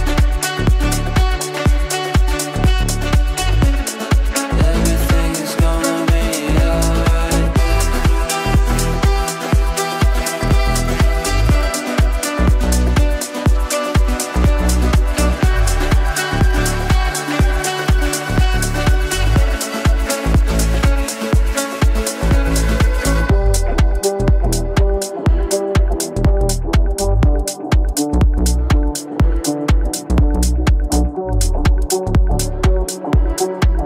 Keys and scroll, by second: 3.1 Delete.